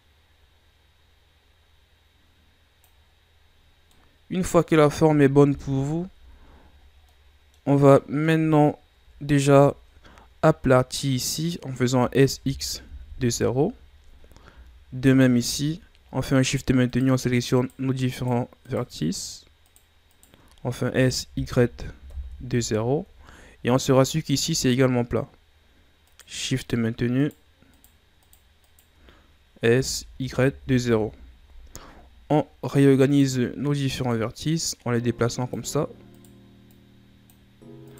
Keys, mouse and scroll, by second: 3.7 scroll down 4, 3.9 middle click, 4.6 Tab, 5.5 KP_1, 6.1 a, 7.1-9.0 middle drag, 9.0 KP_7, 9.4 Tab, 9.9-11.9 scroll up 1, 11.9 s, 15.0 alt+right click, 15.8-16.1 shift+scroll down 1, 16.1-16.5 scroll up 2, 16.8 right click, 17.5 shift+right click, 18.1 shift+right click, 18.6 shift+right click, 19.1 shift+right click, 19.6 shift+right click, 20.1 shift+right click, 20.8 s, 23.2-24.6 shift+scroll up 11, 24.6-26.0 scroll up 1, 26.0 right click, 26.5 shift+right click, 27.2 shift+right click, 27.7 shift+right click, 28.2 shift+right click, 28.6 shift+right click, 29.7 s, 31.7-33.0 shift+scroll up 6, 33.0 right click, 34.1-36.1 drag, 36.1 right click, 36.6-37.8 drag, 37.8 right click.